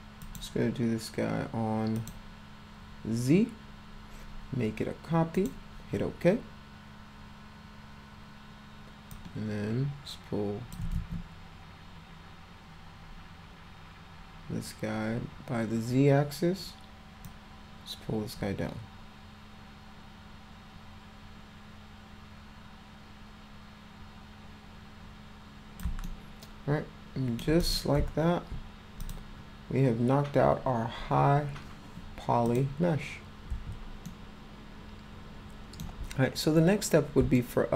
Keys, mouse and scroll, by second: 0.2 click, 0.7 scroll up 2, 1.4 scroll up 2, 2.0 click, 5.4 click, 9.1-10.7 drag, 11.1 ctrl+z, 17.3-25.8 drag, 26.1-27.4 alt+middle drag, 27.6 click, 29.0 click, 32.5 click, 34.1-35.8 ctrl+alt+middle drag, 37.4 alt+middle click.